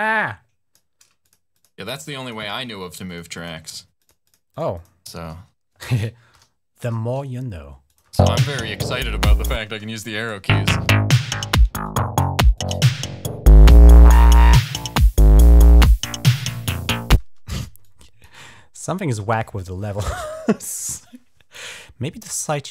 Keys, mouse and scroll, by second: 1.0 click, 1.3-2.5 drag, 2.6 click, 3.2 click, 3.5 click, 3.8 click, 4.0 click, 4.3 click, 4.5 click, 6.1 shift+l, 7.7 click, 7.8 space, 9.4 space, 9.9 click, 10.2 space, 11.6 click, 11.7 typing, 12.3-15.6 drag, 17.0 typing, 17.6 click, 18.5 click, 19.1 click, 19.3 click, 21.5 click, 22.5 click.